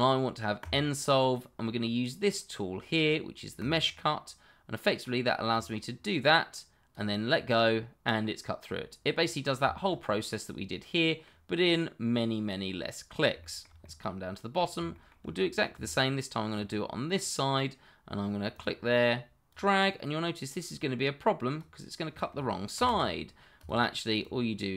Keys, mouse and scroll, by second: 0.6 click, 3.6 click, 7.7 middle click, 9.7 shift+middle click, 9.8 middle click, 13.6 shift+middle click, 14.0 middle click, 14.9 shift+middle click, 15.0 middle click, 15.3 shift+middle click, 15.4 middle click, 16.0 shift+middle click, 16.9 middle click, 18.5 click, 22.7 ctrl+z, 23.5 click.